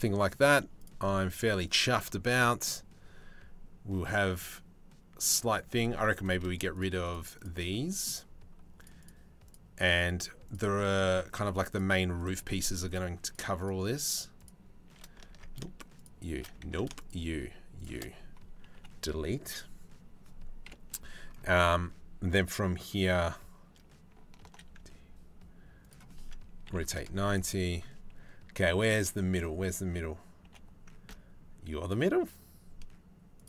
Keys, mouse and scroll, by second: 0.4 middle click, 0.7-5.0 middle drag, 6.3 shift+middle click, 6.7 shift+middle click, 7.0 shift+middle click, 7.3 middle click, 9.1 shift+click, 10.1 shift+click, 10.4 shift+middle click, 12.2 shift+click, 12.5 shift+click, 12.9 shift+click, 13.2 shift+click, 14.0 shift+click, 15.0 ctrl+z, 16.3 ctrl+z, 17.4 shift+click, 18.4 Delete, 20.3 KP_7, 24.1 alt+d, 26.3 r, 30.0 g, 33.3 middle click.